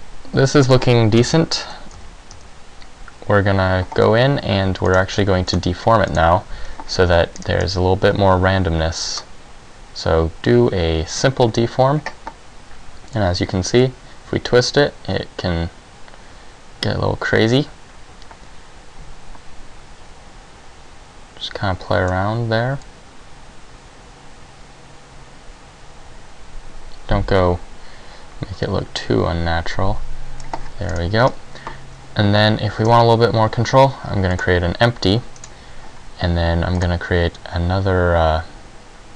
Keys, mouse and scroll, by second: 1.4 KP_1, 2.0 z, 2.5 z, 5.0 click, 5.6 click, 6.2 click, 7.4-8.0 scroll down 3, 9.2 click, 13.3 click, 23.0 click, 31.0-31.5 scroll down 2, 31.3-32.7 scroll up 3, 33.0 shift+a, 35.6 right click, 36.9 click.